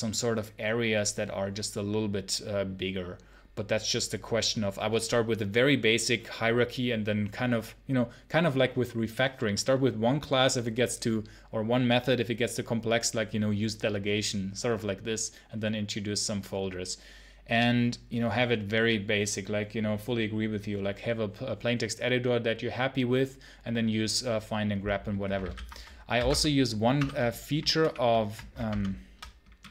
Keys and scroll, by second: 25.2 ctrl+c, 25.3 ctrl+l, 26.0 v, 26.1 space, 26.8 Return, 27.6 super+-.